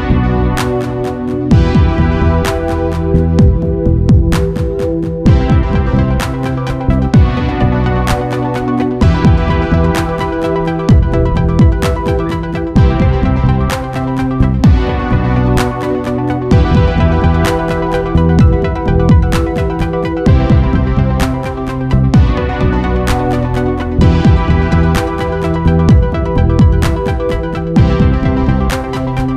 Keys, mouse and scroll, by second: 11.7 alt+a, 22.9 Escape.